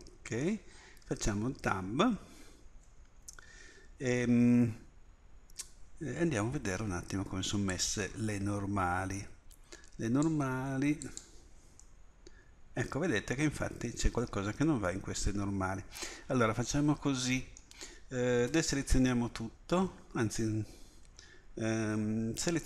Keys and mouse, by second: 1.1 Tab, 3.8 a, 4.2 a, 11.0-12.1 drag, 12.1-13.9 middle drag, 18.5 a.